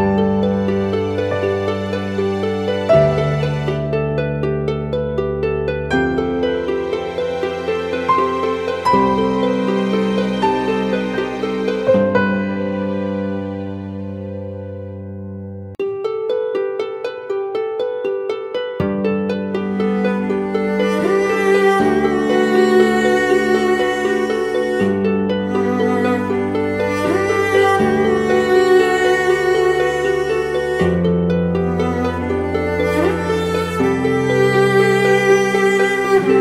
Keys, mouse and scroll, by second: 0.3-0.8 scroll down 1, 1.1 typing, 6.4 ctrl+t, 7.3 alt+shift+click, 10.1 Return, 16.2 double click, 30.3 ctrl+t, 31.4 alt+shift+click.